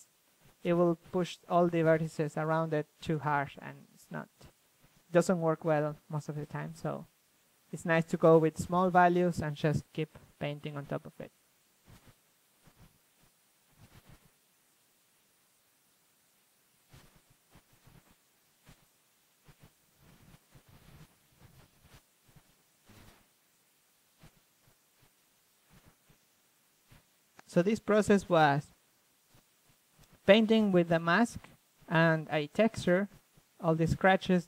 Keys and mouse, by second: 3.0-4.3 drag, 4.9-6.6 middle drag, 6.6-6.9 drag, 6.9 middle click, 7.7-9.8 middle drag, 9.8-11.9 drag, 14.4-15.8 middle drag, 16.4-17.3 middle drag, 17.3-20.1 drag, 22.4 ctrl+z, 24.7-25.2 drag, 25.8-28.6 drag, 29.3-33.9 drag, 34.0-34.4 drag.